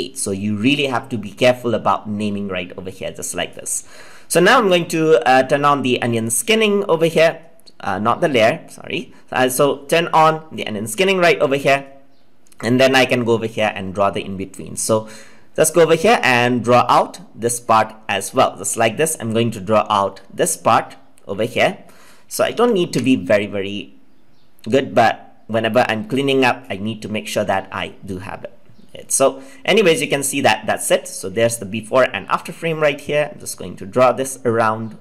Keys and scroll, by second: 22.4 ctrl+z.